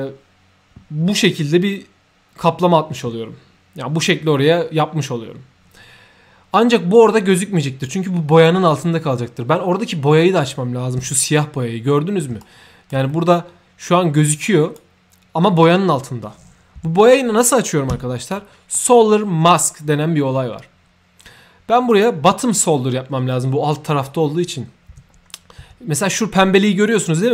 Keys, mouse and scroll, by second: 6.5-6.9 right drag, 11.0 3, 12.4 shift+right click, 13.1-13.9 shift+middle drag, 14.4-14.7 shift+right drag, 16.8 shift+0, 18.4 middle click, 21.9 click, 26.2 middle click.